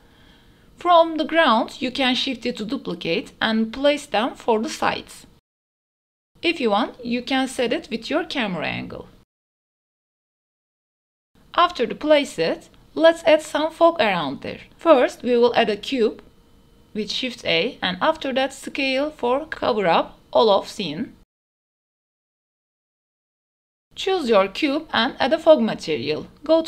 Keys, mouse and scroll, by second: 0.5 click, 0.6-1.0 middle drag, 1.2 shift+drag, 1.9 shift+d, 2.6 y, 6.6-7.0 middle drag, 7.5 shift+middle drag, 8.2 KP_3, 8.9 shift+middle click, 9.2-12.2 typing, 10.1 scroll up 1, 10.4 shift+middle drag, 11.4 shift+middle click, 11.9 shift+middle click, 13.4 KP_0, 14.6 shift+a, 16.5-16.9 middle drag, 17.6 s, 19.3-20.6 typing, 21.2 middle click, 21.5 middle click, 22.0-23.2 typing, 22.7 Tab, 23.8-25.0 drag.